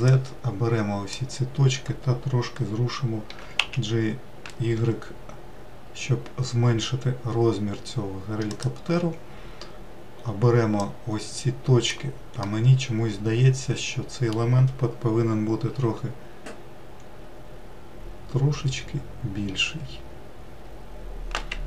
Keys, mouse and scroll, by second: 0.1 alt+z, 0.7 click, 3.9 g, 11.5 click, 13.1-16.2 middle drag, 16.4 s.